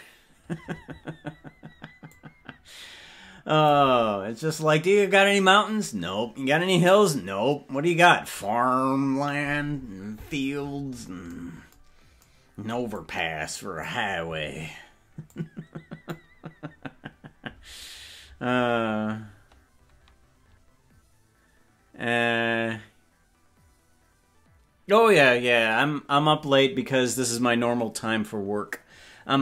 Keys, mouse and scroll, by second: 2.2-4.0 drag, 13.0-14.2 drag, 15.4 click.